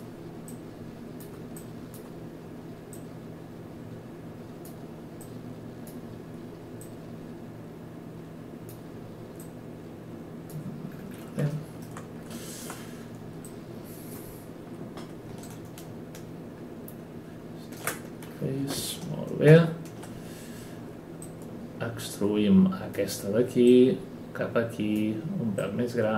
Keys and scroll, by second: 19.4 ctrl+e.